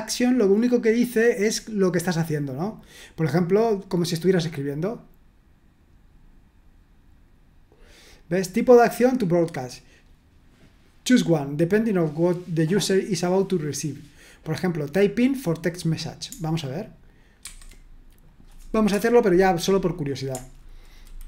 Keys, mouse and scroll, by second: 17.5 super+1, 18.2 click, 18.9 Return.